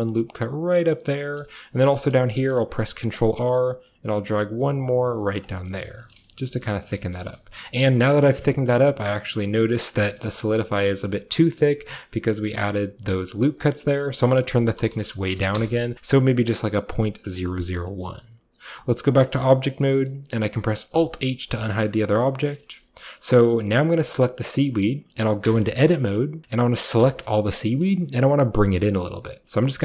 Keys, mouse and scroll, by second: 1.0 click, 1.3-2.1 scroll down 1, 1.9 shift+middle click, 2.1-3.5 shift+middle drag, 2.1-3.5 shift+scroll up 1, 2.6 ctrl+r, 3.5-5.9 ctrl+shift+drag, 3.5-5.3 ctrl+shift+scroll up 1, 5.6-6.3 scroll down 1, 5.7 middle click, 6.2-12.8 shift+middle drag, 6.2 Tab, 6.3-8.0 shift+scroll up 1, 7.0 a, 8.0-10.1 scroll up 1, 10.1 scroll up 1, 11.1-12.8 scroll up 1, 11.8 Tab, 14.1 click, 14.2 click, 14.9 BackSpace, 15.4 BackSpace, 15.5 1, 15.6 Return, 16.0-16.5 scroll up 1, 16.5-17.5 scroll up 1, 17.5 scroll up 1, 17.7 middle click, 17.7-20.1 scroll down 1, 18.1-21.0 middle drag, 18.4 Tab, 20.1-21.0 scroll down 1, 21.0 alt+h, 21.7 a, 21.8-25.5 middle drag, 25.5 Tab, 27.0 a, 27.2 a, 27.7-29.8 shift+middle drag.